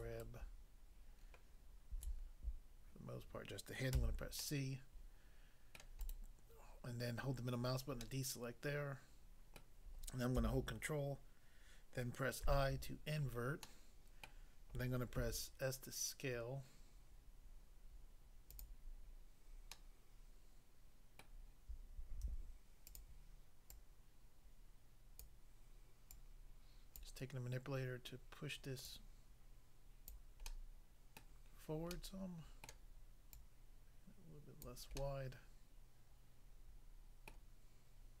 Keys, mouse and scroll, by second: 0.1 ctrl+double right click, 0.3 ctrl+right click, 3.9 c, 4.4 middle click, 5.8 middle click, 6.0 right click, 6.1 right click, 8.0 middle click, 9.6 middle click, 12.4 ctrl+i, 13.7 middle click, 14.3 middle click, 15.2 s, 18.5 click, 18.7 click, 19.8 middle click, 21.2 middle click, 22.2 s, 22.9 click, 23.0 click, 23.7 click, 25.2 click, 26.2 click, 27.0 click, 28.9 click, 30.1 click, 30.5 middle click, 31.2 middle click, 31.9 middle click, 32.7 middle click, 33.3 click, 34.7 click, 35.0 middle click, 37.3 middle click.